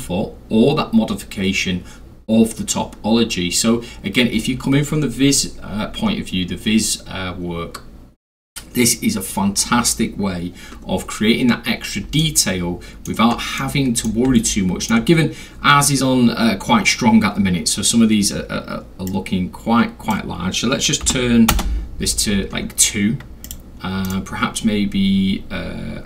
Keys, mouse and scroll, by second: 11.3 middle click, 11.4 scroll, 12.1 alt+scroll, 12.2-13.0 middle drag, 13.6-14.1 middle drag, 13.6-13.9 alt+scroll, 14.4-14.9 alt+middle drag, 19.1-20.1 drag, 21.0 2, 21.5 Return, 23.5 click, 24.1 right click.